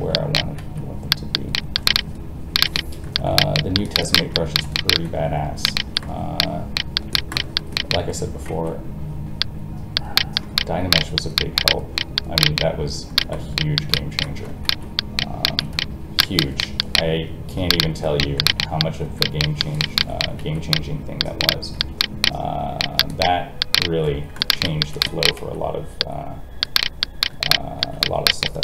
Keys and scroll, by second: 0.6 alt+a, 8.4 alt+a, 14.6 alt+a, 20.3 alt+a, 25.3 alt+a.